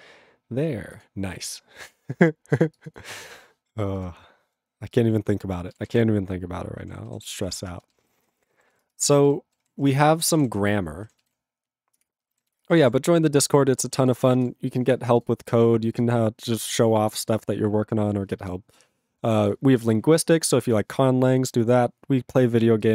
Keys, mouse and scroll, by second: 4.1 ctrl+p, 4.9 click, 5.0 click, 5.6 ctrl+space, 5.7 ctrl+a, 5.8 ctrl+p, 5.9 ctrl+g, 5.9 ctrl+e, 6.0 ctrl+p, 6.5 ctrl+p, 7.2 ctrl+s, 7.3 ctrl+p, 7.7 ctrl+space, 8.1 ctrl+alt+f, 8.4 ctrl+g, 8.7 ctrl+s, 8.8 ctrl+space, 9.2 ctrl+alt+b, 9.6 ctrl+g, 10.0 ctrl+s, 10.2 ctrl+a, 10.2 ctrl+space, 10.3 ctrl+e, 10.4 ctrl+g, 12.1 ctrl+Return, 12.6 Return, 14.1 Return.